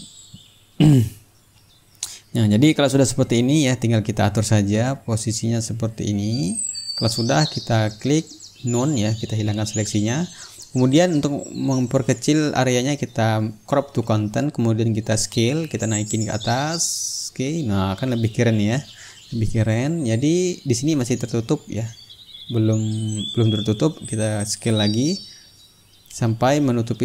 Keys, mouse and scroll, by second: 1.8 ctrl+click, 3.9 click, 5.8-7.6 drag, 8.9-10.1 drag, 11.0 ctrl+click, 11.1-12.4 ctrl+middle drag, 12.9-14.2 drag, 14.3 click, 15.5-19.5 drag, 20.3-22.2 drag, 22.4 click, 23.3-25.8 ctrl+drag, 26.3-27.0 drag.